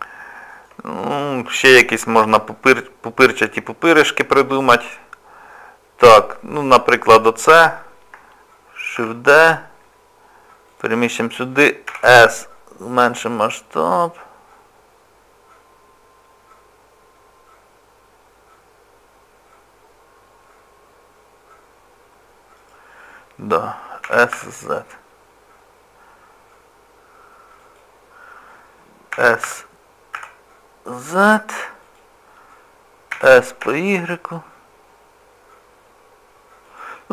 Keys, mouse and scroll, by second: 1.2 middle click, 2.9-4.3 scroll up 2, 6.0 click, 7.1 middle click, 9.0 shift+d, 11.9 s, 24.1 s, 29.1 s, 33.1 s.